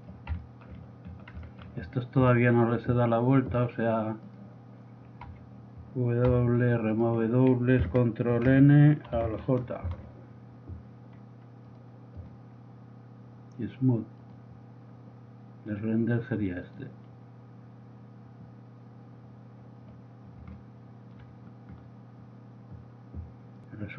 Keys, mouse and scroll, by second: 2.3-3.5 right drag, 5.4 a, 6.4 w, 8.5 ctrl+n, 10.0 alt+j, 14.3-14.7 drag, 17.7 click.